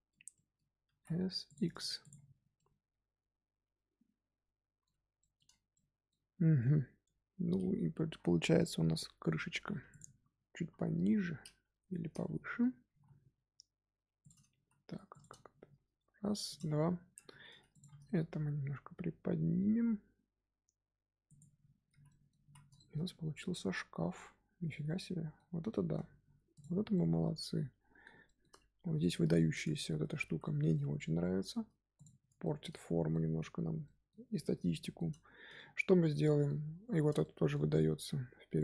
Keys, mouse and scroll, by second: 0.8 s, 1.7 Tab, 1.9 click, 2.3 scroll down 1, 2.5-6.5 middle drag, 6.5-7.0 scroll up 1, 7.0 Tab, 7.4-9.6 scroll up 1, 9.6 3, 9.8 click, 10.5 KP_1, 12.8 g, 16.6 Tab, 17.1 Tab, 17.3 2, 17.6 alt+click, 18.2 g, 21.4 Tab, 21.6 scroll down 4, 21.8 z, 22.0-22.3 middle drag, 22.3 z, 22.7-25.9 shift+middle drag, 25.9-26.5 scroll up 4, 26.5 click, 26.9-28.9 middle drag, 28.9 click, 29.3-29.9 shift+middle drag, 29.9 Tab, 30.2 3, 30.6-31.9 middle drag, 31.9 click, 32.4-32.8 shift+middle drag, 32.8 z, 33.0-33.5 middle drag, 33.5 z, 33.8-34.3 middle drag, 34.3 scroll down 1, 34.6-38.5 shift+middle drag, 38.5 shift+click.